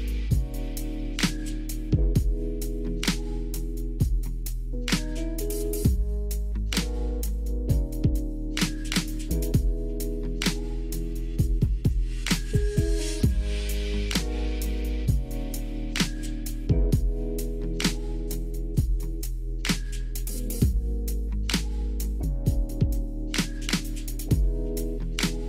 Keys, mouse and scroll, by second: 0.4 KP_1, 1.4 click, 2.4 Tab, 3.6 s, 4.9 x, 6.2 click, 7.1 Tab, 7.8 KP_3, 9.2 click, 9.6 click, 9.9 shift+middle click, 11.3 e, 12.8 r, 13.4 g, 14.5 click, 14.9 shift+middle click, 15.6 e, 17.1 r, 18.0 g, 19.9-21.0 drag, 21.0 e, 21.8 click, 22.5 r, 23.3 g, 24.5 click.